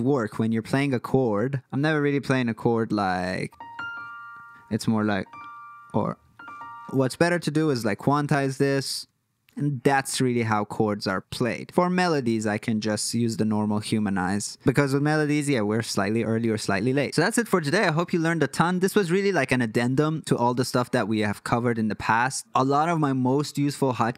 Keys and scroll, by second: 7.7 q, 13.1 h, 16.7 super+z.